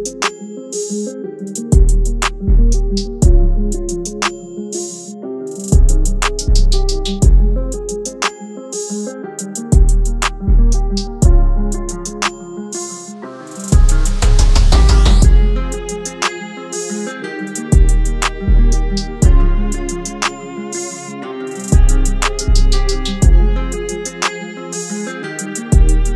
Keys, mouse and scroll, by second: 1.3 click, 2.7 Tab, 3.7 shift+Tab, 4.3 Tab, 5.7 click, 7.2 Tab, 9.3 shift+Tab, 10.4 Tab, 11.4 shift+Tab, 13.1 Tab, 14.3 shift+Tab, 16.3 Tab, 19.9 click, 23.5-26.1 drag.